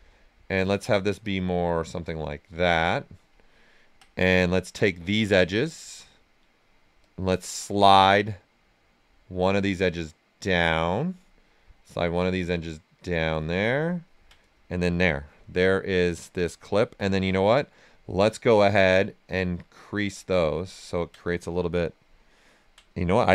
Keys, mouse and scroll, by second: 0.2-2.2 drag, 2.2 right click, 4.7 space, 5.6 click, 6.3 space, 7.0 click, 7.6 click, 9.1-11.8 drag, 11.8-13.6 drag, 13.6-15.6 ctrl+right drag, 15.6 right click, 16.4-17.8 ctrl+right drag, 17.8 space, 19.8 click, 20.6 ctrl+right click, 23.1 space.